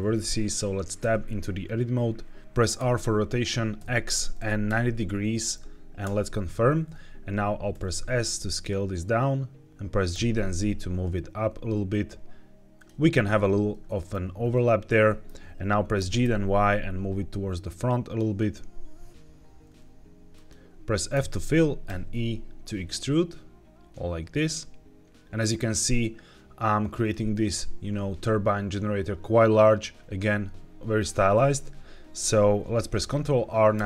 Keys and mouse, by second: 0.9 Tab, 2.4 Escape, 2.4-4.6 typing, 5.9 KP_Enter, 7.6 s, 10.0 g, 10.2 z, 12.6 click, 13.7 shift+middle click, 14.9 shift+middle click, 15.9 g, 16.1 y, 21.0 f, 21.8 e, 26.9 click, 33.6 ctrl+r.